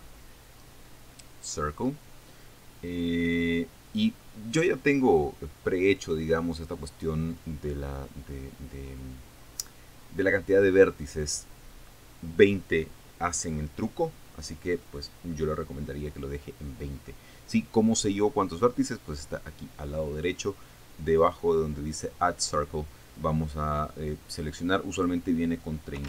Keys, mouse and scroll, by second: 0.4 shift+a, 2.0 click, 25.6 click.